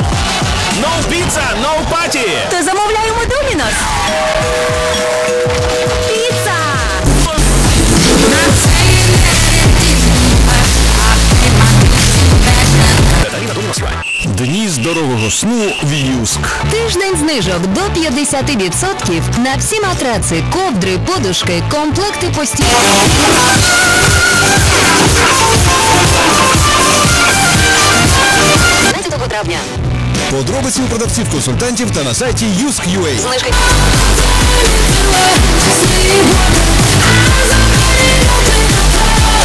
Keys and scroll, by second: 13.4 Page_Down, 29.0 Page_Down.